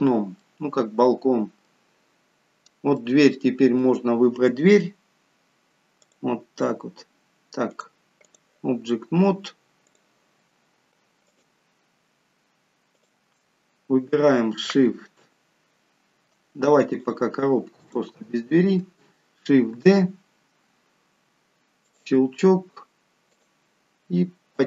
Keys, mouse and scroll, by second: 0.4 middle click, 2.9 middle click, 5.9 click, 7.7 click, 11.2 shift+click, 11.6 shift+click, 13.3 shift+click, 16.9 click, 17.8 click, 19.7 shift+d, 23.3 click.